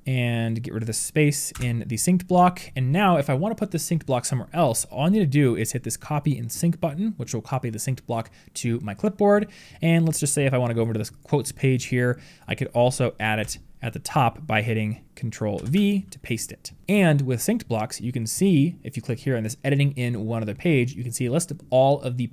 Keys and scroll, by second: 15.4 ctrl+v.